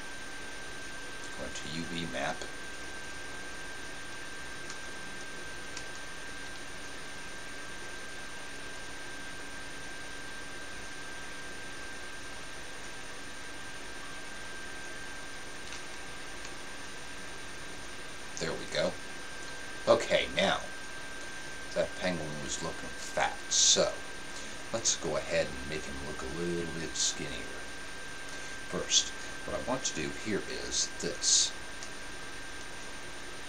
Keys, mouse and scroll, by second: 5.7 middle click, 5.7 a, 8.5-10.2 drag, 15.8 a, 16.8 a.